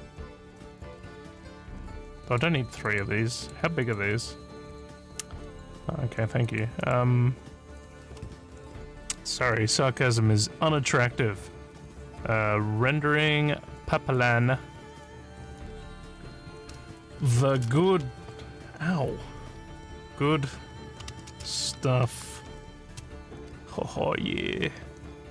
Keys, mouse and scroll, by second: 2.3 click, 2.9 click, 3.4 click, 3.8 right click, 6.5 click, 6.8 right click, 14.1 click, 17.2-18.2 typing, 20.8-22.9 typing.